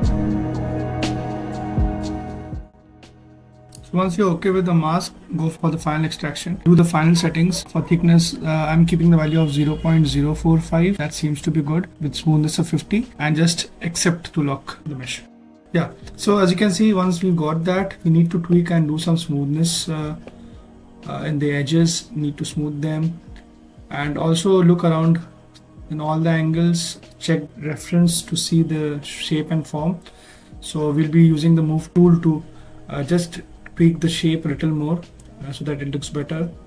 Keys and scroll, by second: 13.3 0, 14.5 4, 14.8 5, 22.0 ctrl+z, 33.6 s.